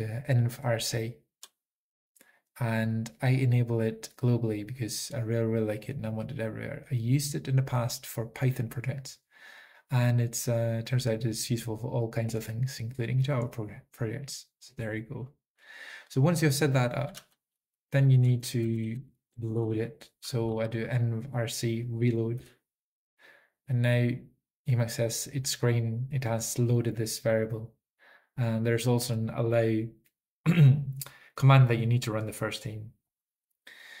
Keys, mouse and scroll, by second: 16.8-17.6 typing, 18.7 Down, 18.7 Up, 18.9 Up, 19.1-19.9 typing, 20.5 alt+x, 20.5 Right, 22.5 Return, 29.7-33.2 typing.